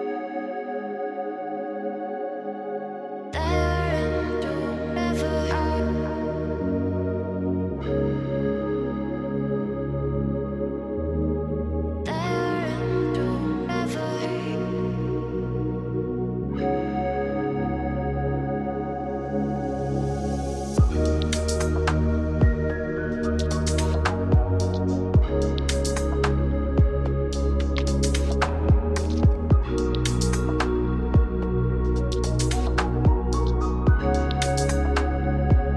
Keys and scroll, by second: 18.4 ctrl+g, 22.7 ctrl+shift+[, 23.2 ctrl+shift+], 31.6 ctrl+space.